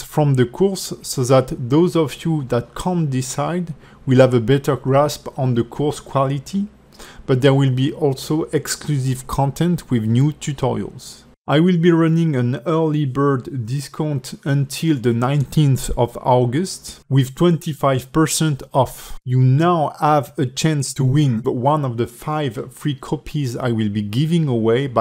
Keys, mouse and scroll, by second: 0.4 click.